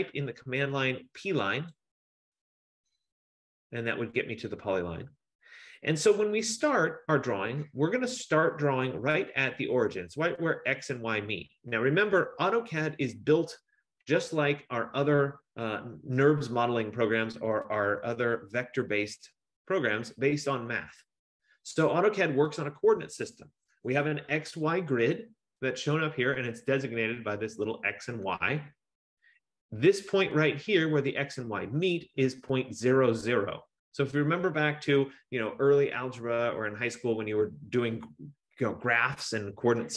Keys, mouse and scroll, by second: 1.8 click.